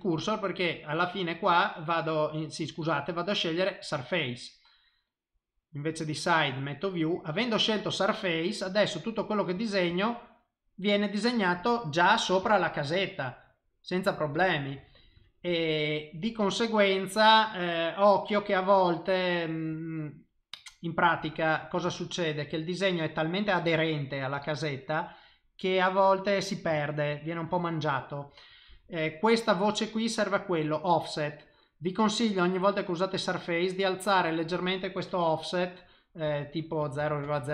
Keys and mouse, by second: 0.5 click, 2.6 click, 5.6 click, 7.3 click, 8.6 click, 9.6 click, 9.9 click, 10.4 middle click, 11.8 middle click, 12.4 shift+middle click, 12.9 middle click, 14.3 ctrl+z, 14.8 ctrl+z, 15.2 ctrl+z, 16.3 click, 19.7 click, 21.3 middle click, 21.9 ctrl+middle click, 22.6 middle click, 24.0 middle click, 25.7 click, 27.1 ctrl+z, 27.5 ctrl+z, 28.9 click.